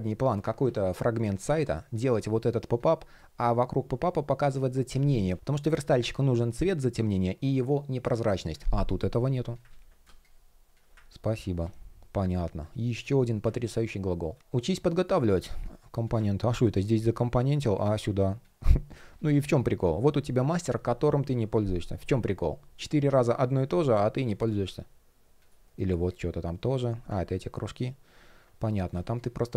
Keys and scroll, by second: 0.2 super+z, 9.3 super+z, 14.4 shift+o, 14.7 shift+o, 16.2 shift+p, 25.2 shift+p, 28.3 shift+o.